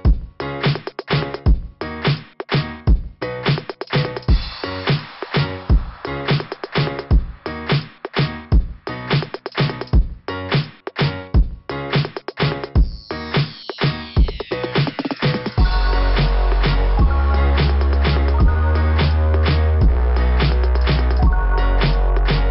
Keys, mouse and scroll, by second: 14.9 click, 14.9 click, 20.0 Return.